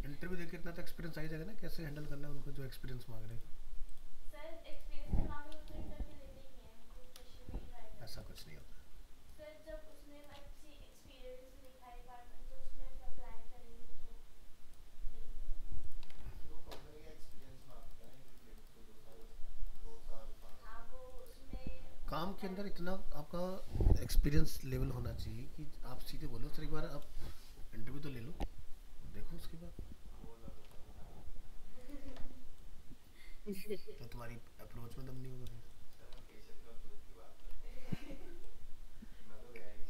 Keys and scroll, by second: 16.1 alt+Tab, 30.7 alt+Tab, 36.2 alt+Tab.